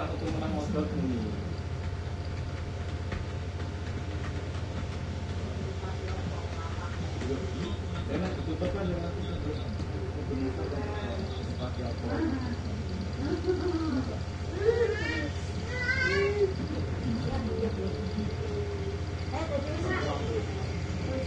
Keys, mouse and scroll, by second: 0.3 shift+Home, 1.7-9.2 typing, 10.8 click, 12.0-13.5 drag, 14.5-15.9 drag, 20.4 click.